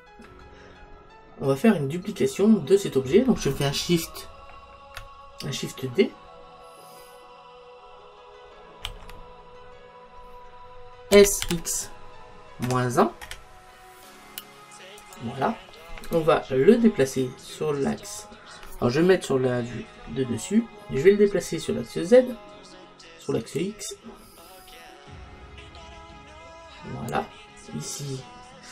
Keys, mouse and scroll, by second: 1.3-4.0 middle drag, 1.6-2.4 scroll down 1, 2.4-3.4 scroll down 1, 8.9 shift+d, 15.2 click, 20.0 KP_7, 23.7 click.